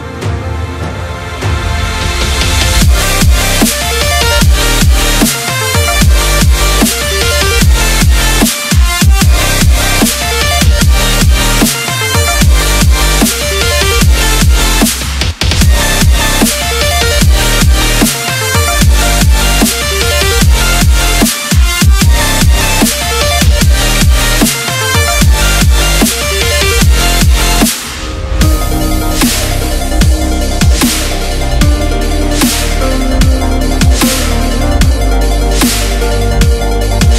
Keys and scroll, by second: 19.7 KP_Subtract, 19.9 KP_4, 20.2 KP_0.